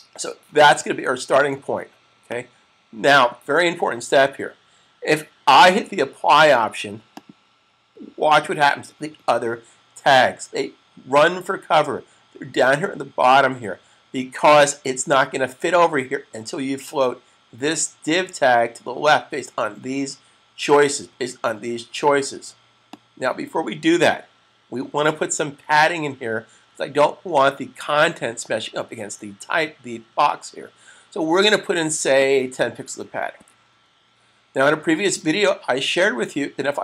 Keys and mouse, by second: 2.2 click, 7.4 click, 22.6 click, 32.2 click, 33.1-33.9 typing, 33.2 click.